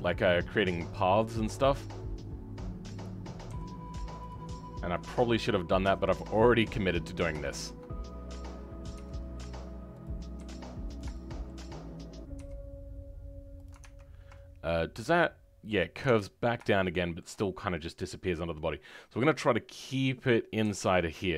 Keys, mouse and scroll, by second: 7.4-8.9 shift+middle drag, 8.9 e, 11.1-12.3 shift+middle drag, 12.3 e, 16.7-20.6 shift+middle drag, 20.6 e.